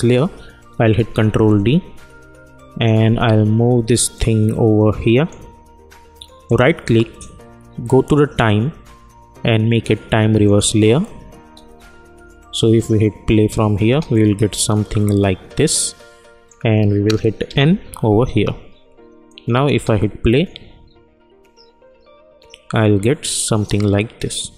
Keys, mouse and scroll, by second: 0.9 ctrl+d, 4.1-6.4 drag, 6.4 right click, 10.4 click, 11.4 space, 13.8 space, 14.1-17.4 drag, 17.4 n, 19.2 click, 19.7 space.